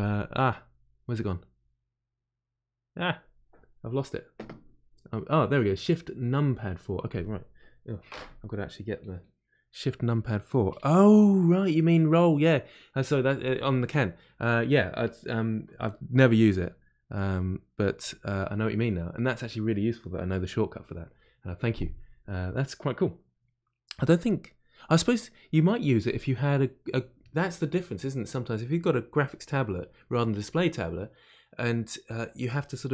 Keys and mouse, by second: 10.1 shift+KP_4, 10.5 shift+KP_4, 15.8-17.8 typing.